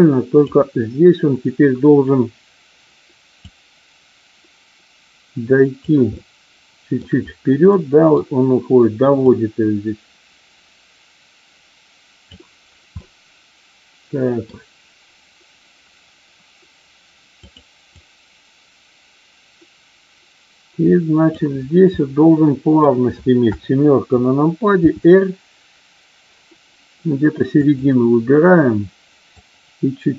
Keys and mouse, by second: 3.4-5.9 drag, 6.0-6.9 middle drag, 7.8 middle click, 9.3-12.4 drag, 12.9-14.4 middle drag, 17.4 click, 17.9-21.4 drag, 21.9 middle drag, 22.5 middle click, 23.5 KP_7, 24.8 r, 27.5 click, 29.3-30.1 drag.